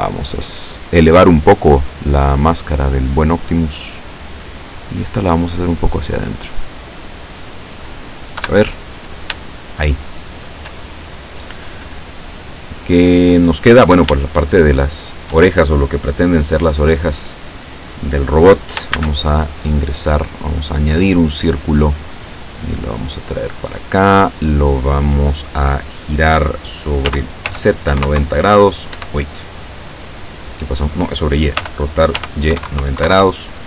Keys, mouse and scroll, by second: 1.8 middle click, 2.6-4.3 middle drag, 4.8 right click, 5.8-8.0 drag, 8.0-10.8 middle drag, 8.4 KP_7, 14.3-15.6 shift+middle drag, 16.3 scroll down 2, 18.5 scroll up 2, 19.1 shift+a, 21.0 click, 21.7 scroll down 2, 22.9 click, 24.7-25.3 scroll up 1, 27.1 r, 27.5 z, 28.0 KP_9, 28.1 KP_0, 29.0 Escape, 31.7 r, 32.3 y, 32.6 KP_9, 32.7 KP_0, 33.1 KP_Enter.